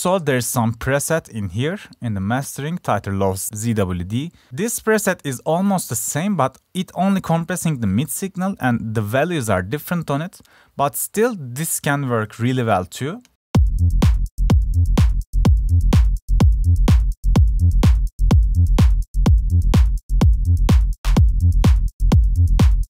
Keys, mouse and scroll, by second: 16.6 click.